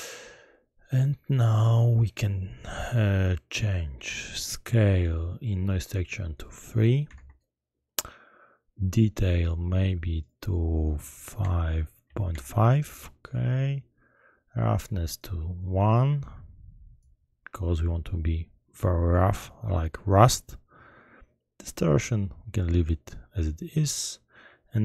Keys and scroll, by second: 7.2 Return, 12.0 ., 12.3 5, 12.5 Return.